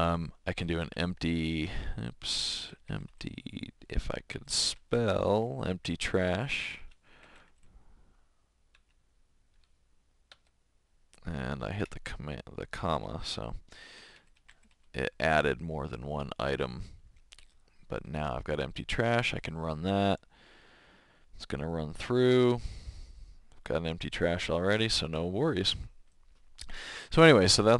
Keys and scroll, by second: 0.3-5.6 typing, 6.7 Tab, 6.9-7.9 typing, 8.7 Tab, 10.4 Escape, 13.7-15.2 typing, 19.0 Return.